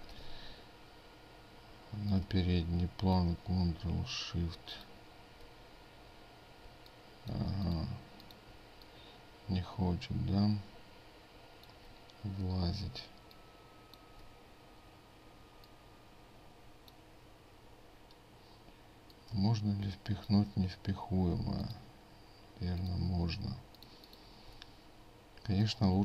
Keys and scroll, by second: 4.6 ctrl+space, 8.6 ctrl+space, 12.9 ctrl+space, 21.5 ctrl+alt+space.